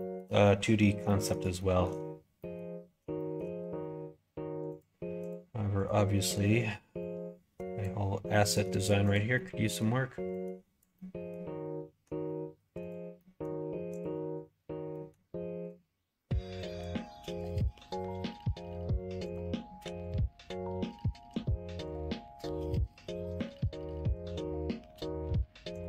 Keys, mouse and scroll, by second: 0.4 middle click, 1.0 middle click, 1.5 shift+middle click, 2.3 middle click, 3.1 shift+middle click, 4.6 click, 5.2 click, 5.7 click, 6.1 middle click, 7.0 click, 8.2 scroll up 1, 8.3 middle click, 8.6 scroll down 1, 9.0 click, 9.3 middle click, 10.3 click, 10.9 scroll up 1, 10.9-12.8 middle drag, 12.8 click, 13.1 middle click, 13.9 click, 14.8 middle click, 15.6-17.4 drag, 18.2 click, 19.2 click, 19.8 2, 20.0 click, 21.3 g, 22.0 middle click, 22.7 scroll up 1, 22.8 middle click, 23.3 scroll down 1, 23.5 g.